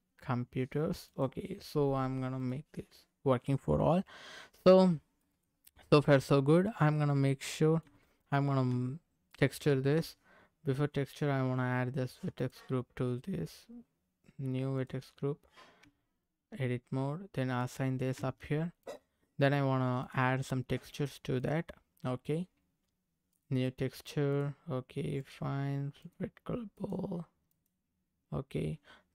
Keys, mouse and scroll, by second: 1.0 click, 2.4 click, 5.0 scroll up 1, 5.2 middle click, 6.2 click, 7.0-7.4 scroll up 3, 7.4 middle click, 7.8 Tab, 9.3 middle click, 9.7 Tab, 11.0 click, 12.3 click, 14.8 click, 15.8 Tab, 17.6 click, 18.1 Tab, 18.8 click, 20.0 click, 21.6 click, 23.3 click, 24.3 click.